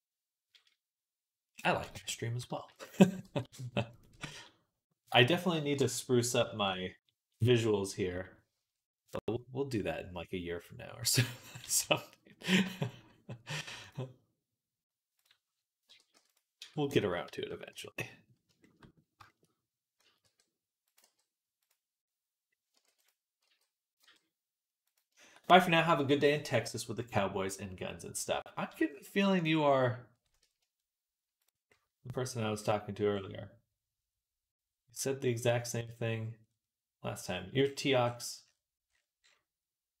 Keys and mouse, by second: 2.5 shift+d, 3.1 g, 4.0 e, 5.5 click, 11.5 g, 15.7 l, 16.0 p, 16.4 Tab, 17.1 Tab, 17.5 KP_3, 19.8 a, 20.1 r, 20.9 g, 21.9 click, 22.1 click, 22.7 ctrl+r, 28.6 x, 29.6-31.5 middle drag, 31.6-40.0 drag.